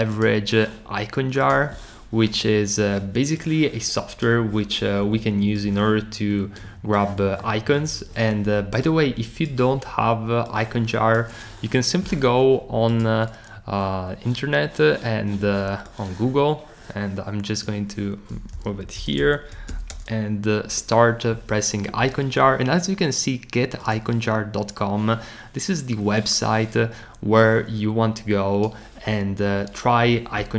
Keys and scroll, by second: 18.3-20.4 typing, 20.7 Return.